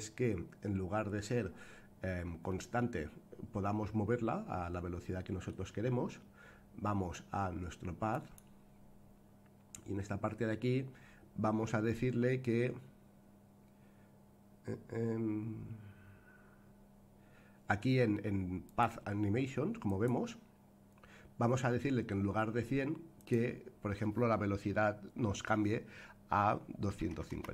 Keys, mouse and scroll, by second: 0.9-1.3 scroll up 2, 2.5-5.5 middle drag, 8.1 click, 18.6 click, 19.8 click, 23.1-27.5 drag.